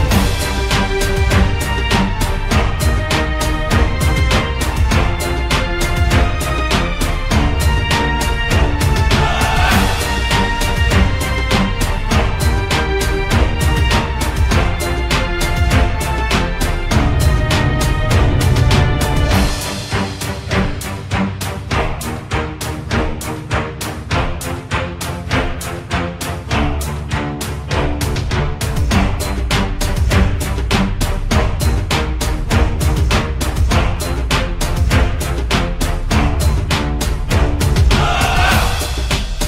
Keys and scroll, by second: 4.1-6.0 typing, 23.6-24.6 typing, 26.0 c.